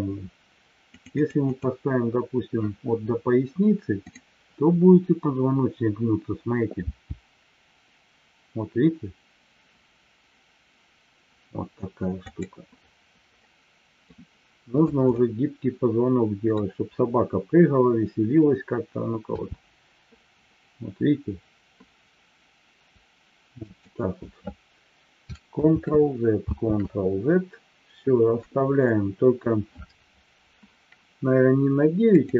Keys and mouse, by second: 0.9-2.1 drag, 3.9 click, 13.5-14.1 middle drag, 15.2-16.6 middle drag, 25.9 ctrl+z, 32.2 click.